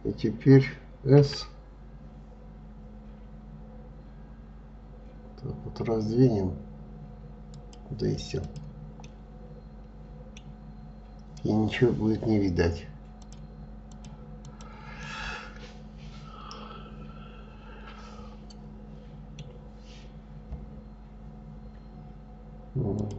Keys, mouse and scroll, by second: 0.8 s, 8.0 click, 8.6-10.0 middle drag, 10.0-12.3 scroll down 4, 12.8 click, 13.5 click, 14.0 click, 14.6-17.6 middle drag, 19.4 scroll up 3, 20.3-22.5 scroll up 1, 22.5 click.